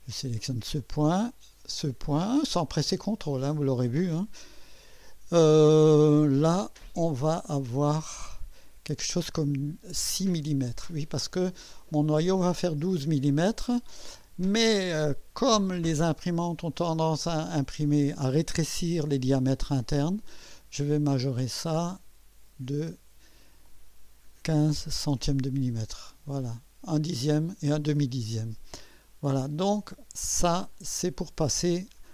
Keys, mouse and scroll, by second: 2.0 click, 8.3 click, 21.2 click, 21.7-23.1 drag, 24.5-25.6 typing, 30.5 click.